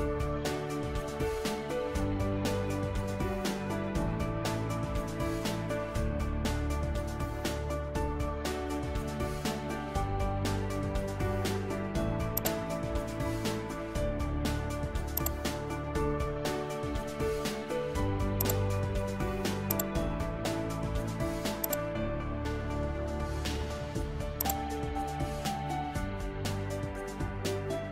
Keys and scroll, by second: 0.4 i, 1.0 n, 2.6 5, 5.3 -, 8.3 o, 10.5 n, 24.6 f, 25.4 i, 26.6 5.